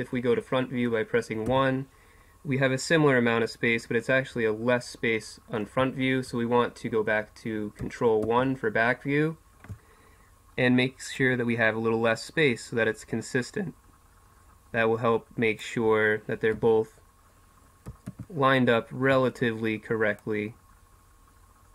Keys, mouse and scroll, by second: 1.5 KP_1, 4.7 middle click, 8.2 ctrl+KP_1, 16.5 KP_1, 18.1 ctrl+KP_1.